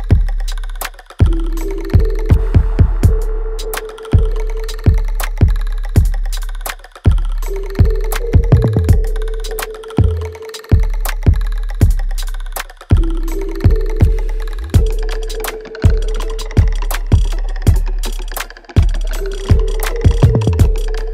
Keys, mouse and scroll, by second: 2.4 click, 5.1 click, 7.3 scroll up 1, 7.8 alt+click, 8.2 alt+right click, 8.6 alt+click, 9.8 ctrl+s, 10.1-10.5 scroll up 1, 10.7 alt+click, 11.9 alt+right click, 12.4-18.8 alt+drag, 19.1 alt+middle click, 19.6 alt+click, 20.0 alt+middle click, 20.4 alt+right click, 20.8 alt+click.